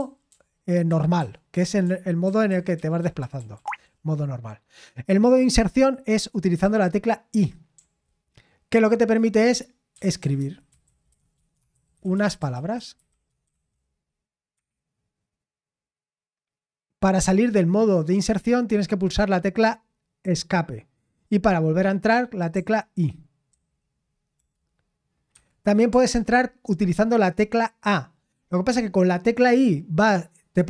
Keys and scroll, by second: 0.0-4.2 typing, 7.8 typing, 9.7-14.0 typing, 14.6 Escape, 22.5-24.4 typing, 25.3 Escape, 25.9 l.